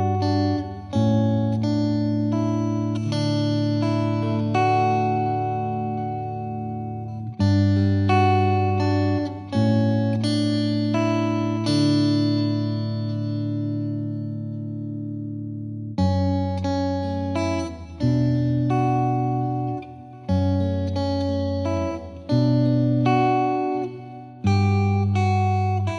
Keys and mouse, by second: 0.1-1.3 drag, 2.5-3.7 drag, 5.1-6.2 drag, 7.6-8.8 drag, 9.3-10.4 drag, 11.0 click, 13.4 click, 15.7 click, 17.1 click, 19.9 click, 20.8 click, 21.8 click, 23.2 click, 25.6 click.